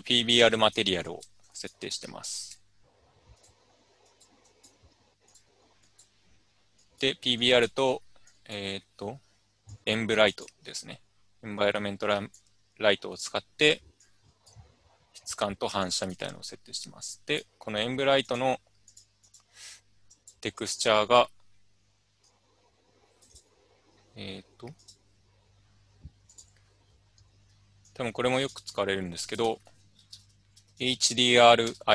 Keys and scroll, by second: 29.6-31.7 typing.